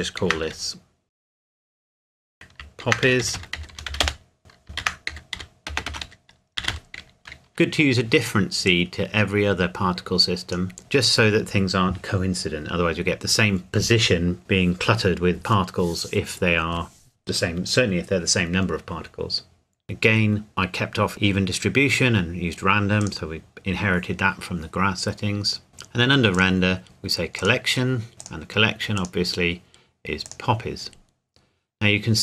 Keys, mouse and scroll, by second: 0.2 shift+p, 0.5 o, 1.1 click, 2.8-6.7 typing, 4.0 Return, 4.4 click, 7.5 click, 19.8 click, 23.0 click, 27.4 click, 28.1 scroll down 1, 28.2 click.